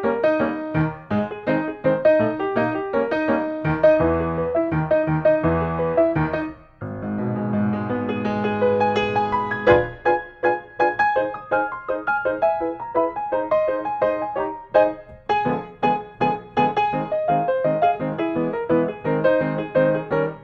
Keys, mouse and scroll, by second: 1.4-2.4 middle drag, 2.6-3.7 drag, 4.8-5.9 drag, 6.3-7.4 drag, 8.3-9.4 drag, 9.9 middle click, 9.9 scroll up 1, 10.1 scroll, 10.1 scroll up 1, 10.3 scroll, 11.7 click, 12.3-13.5 scroll, 14.7-15.4 scroll, 16.1-16.4 scroll, 19.3-20.3 scroll.